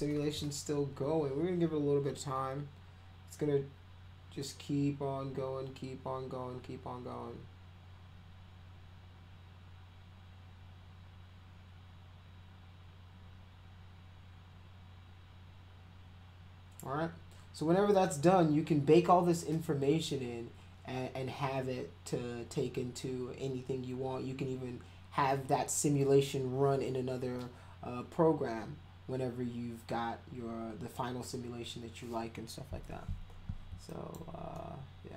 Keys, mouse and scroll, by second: 33.9 alt+click, 34.5-35.1 alt+middle drag.